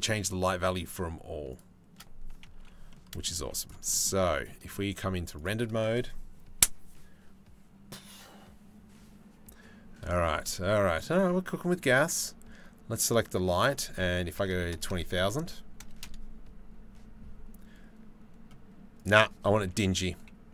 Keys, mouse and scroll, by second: 2.2 Delete, 2.5 middle click, 3.0 z, 10.0 shift+middle click, 11.7 click, 14.3-16.6 drag, 14.3 KP_0.